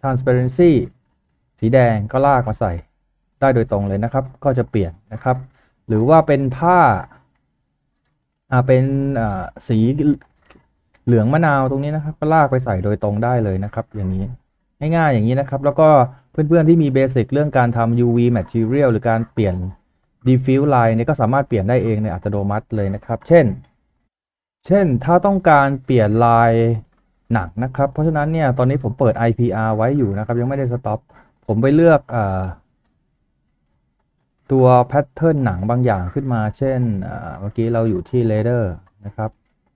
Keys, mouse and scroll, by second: 7.3 scroll down 1, 8.8-9.5 typing, 38.0-38.4 scroll up 1.